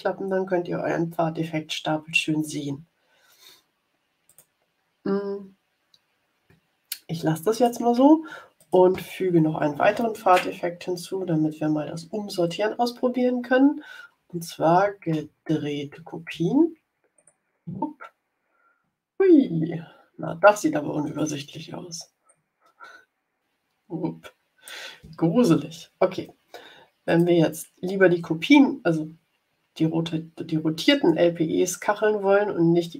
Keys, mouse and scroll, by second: 4.2 click, 7.4 click, 8.5 click, 14.1-16.2 typing, 17.1 click, 19.5-19.8 ctrl+scroll down 2, 20.9 click, 22.2-24.8 drag, 27.0 click.